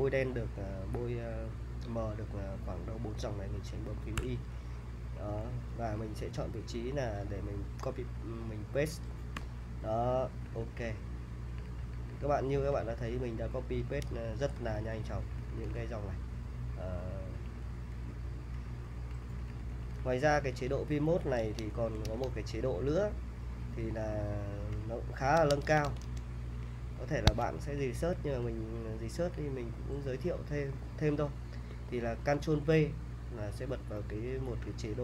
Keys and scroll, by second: 4.2 y, 5.4-5.9 typing, 9.4 p, 10.5-21.2 typing, 21.4 super+Tab, 22.1 super+Tab, 23.4-24.7 typing, 25.4 Tab, 25.7 Tab, 25.9 Tab, 25.9-31.1 typing, 27.3 Escape, 33.6 ctrl+v.